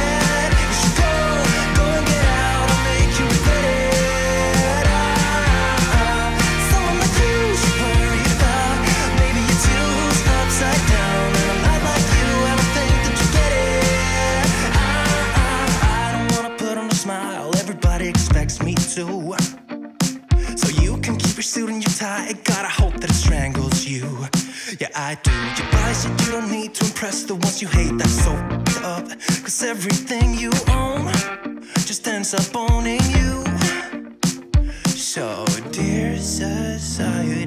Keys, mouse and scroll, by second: 2.0-2.4 scroll down 1, 4.9 click, 7.0-7.5 scroll up 1, 8.6-13.0 drag, 19.5-20.1 click, 20.0-21.8 scroll down 2, 21.8 scroll down 1, 22.4-23.7 drag, 24.1-25.0 scroll up 1, 25.0 click, 26.5-28.4 shift+drag, 29.5-30.1 click, 30.6 scroll up 1, 32.1-33.1 click, 33.2 ctrl+z, 34.1-34.7 drag.